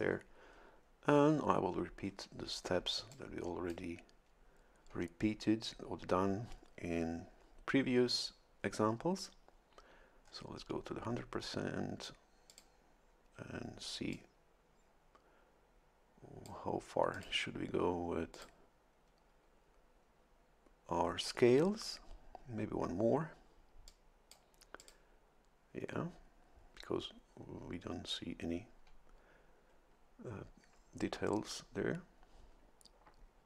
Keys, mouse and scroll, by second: 2.2 ctrl+scroll up 2, 3.1 ctrl+click, 10.2 scroll up 2, 10.8 scroll up 2, 12.5 click, 14.1-16.6 drag, 17.1 click, 18.3 click, 23.9 click, 24.8 click.